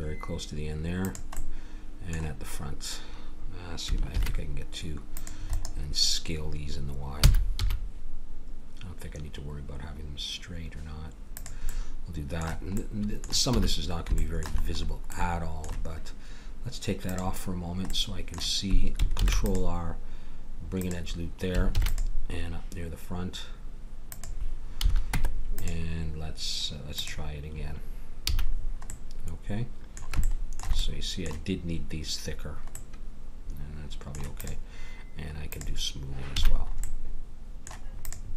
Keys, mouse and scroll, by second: 4.2 ctrl+r, 7.2 s, 11.7 middle click, 13.6 a, 17.9-19.1 middle drag, 19.1 ctrl+r, 21.7 ctrl+r, 24.8 a, 25.1 Tab, 26.9-28.0 drag, 28.3 a, 34.4-36.4 drag, 36.4 a, 36.6 middle click, 37.4 middle click, 38.0-38.3 drag.